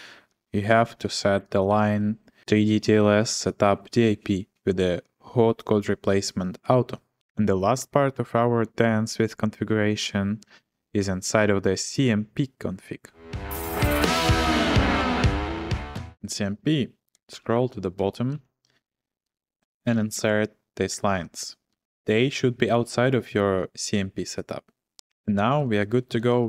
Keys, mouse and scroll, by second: 0.7 o, 1.7 ctrl+shift+v, 17.1 click, 17.1-19.8 typing, 23.5 typing, 25.6 click, 25.7 ctrl+p, 25.9-26.4 typing.